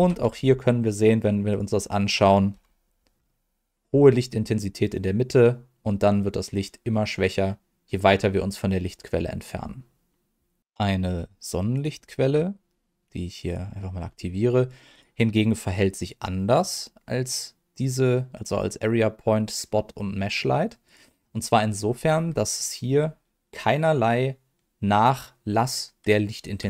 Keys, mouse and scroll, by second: 0.2 z, 1.5 click, 2.5 KP_7, 3.1 scroll down 1, 3.8 scroll down 2, 10.6 click, 11.7 click, 13.4 click, 14.9 click, 20.8 click, 21.3 click.